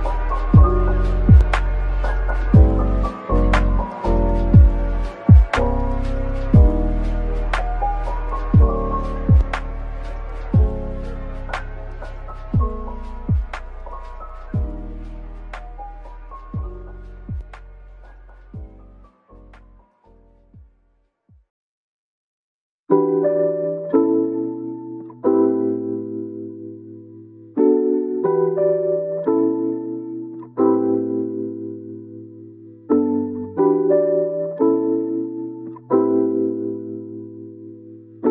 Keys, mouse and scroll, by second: 0.0 Return, 0.5-1.4 scroll down 1, 1.4 middle click, 1.9 Tab, 8.7 Tab, 14.3 middle click, 15.2-15.7 typing, 17.3 middle click, 17.8 scroll up 1, 18.3-19.3 typing, 22.3-22.6 typing, 23.8 middle click, 24.8-25.7 typing, 27.7-28.1 typing, 31.8-32.7 typing, 34.2-34.5 typing, 35.6 middle click.